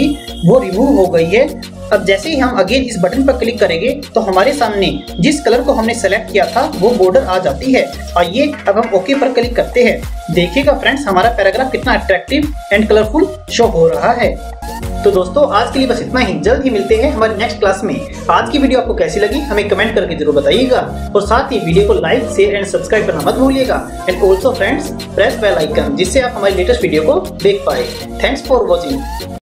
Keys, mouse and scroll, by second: 3.0 click, 9.0 click.